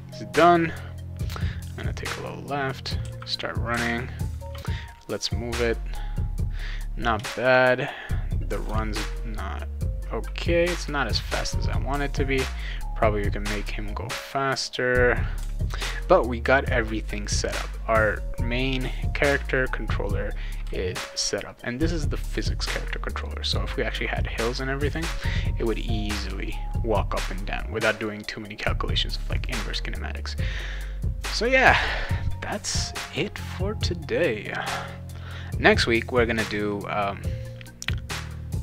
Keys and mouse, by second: 0.3 shift+a, 3.0 shift+d, 3.7 d, 8.7 d, 11.9 a, 15.4 d, 19.2 a, 20.6 a, 29.3 click.